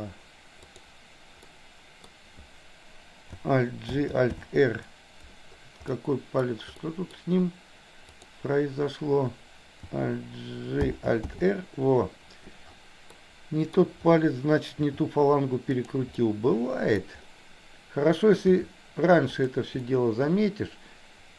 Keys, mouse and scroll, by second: 0.7 click, 1.6 middle click, 4.0 alt+g, 4.3 alt+r, 5.9 middle click, 6.8 middle click, 8.2 click, 11.0 alt+g, 11.3 alt+r, 13.2 middle click, 14.8 r, 16.2 middle click, 18.5 r, 19.8-21.3 middle drag.